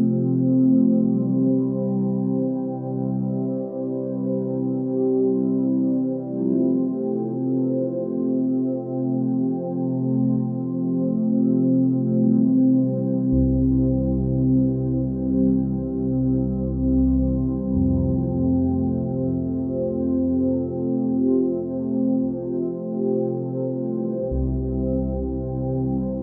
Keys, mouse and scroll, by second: 2.4 g, 8.4 b, 9.2 x.